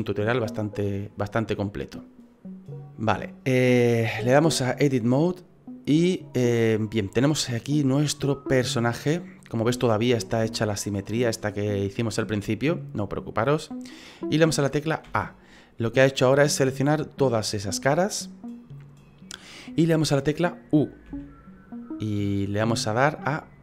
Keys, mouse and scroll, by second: 1.6 middle click, 4.5 click, 7.2 middle click, 9.8-10.2 scroll up 4, 10.6-12.1 scroll down 4, 12.1 middle click, 15.1 a, 16.5 middle click, 21.1 u.